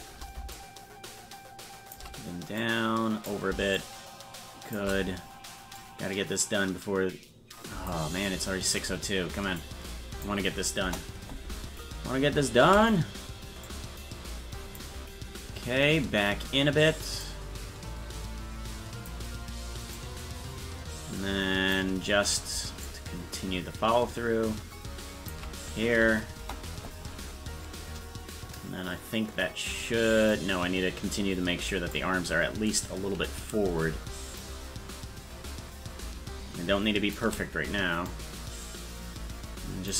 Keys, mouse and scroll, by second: 0.5-2.0 shift+drag, 2.6 click, 3.8-4.8 shift+drag, 5.8-7.9 drag, 9.6 click, 10.8 KP_0, 13.7-14.8 drag, 17.2-19.1 drag, 20.0-21.8 drag, 22.9-25.3 shift+drag, 26.4 KP_0, 30.3-32.0 drag, 32.3-33.0 scroll down 3, 34.4-37.2 shift+drag, 38.1-39.9 drag.